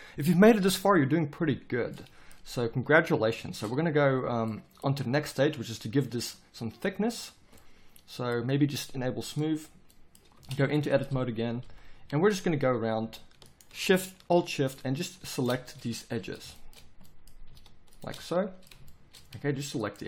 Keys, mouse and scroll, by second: 10.3 Tab, 11.6 a, 12.0 a, 13.6-15.1 right drag, 15.7 z.